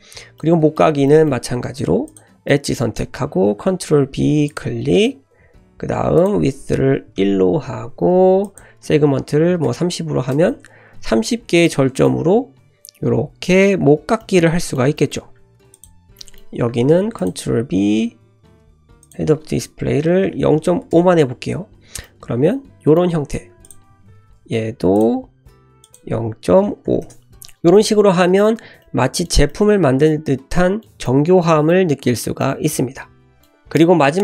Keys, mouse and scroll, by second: 0.4-0.9 middle drag, 1.0-1.4 middle drag, 2.0 click, 2.5 middle click, 3.5 ctrl+b, 6.1-7.7 drag, 8.4-10.8 drag, 11.7 middle click, 12.3 Tab, 14.2-15.1 middle drag, 15.3 Tab, 15.7 click, 16.2 middle click, 16.8 ctrl+b, 19.0-21.4 drag, 20.4 typing, 21.8 Tab, 22.0 middle click, 23.1 Tab, 23.6 click, 24.0 ctrl+b, 25.8-27.5 drag, 27.3 Tab, 27.9-28.6 middle drag, 28.6 `, 28.8 l, 29.1 shift+middle click, 29.4-29.8 middle drag, 33.6 middle click.